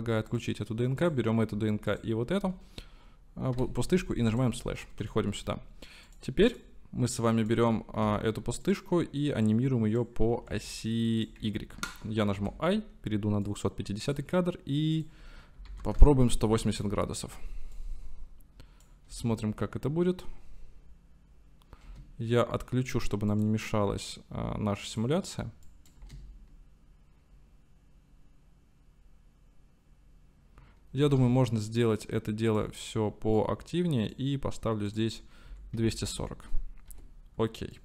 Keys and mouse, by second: 0.3 click, 5.2 shift+click, 6.2 click, 6.6-7.6 drag, 8.7 click, 10.4 ctrl+z, 11.5 ctrl+z, 12.4 i, 15.1-17.0 drag, 16.7 i, 17.8-18.9 drag, 19.2 space, 23.4-25.0 drag, 23.4 space, 25.7 click, 26.0 space, 31.1 space, 32.6 click, 33.5-37.2 drag, 36.9 i, 37.7-37.8 drag.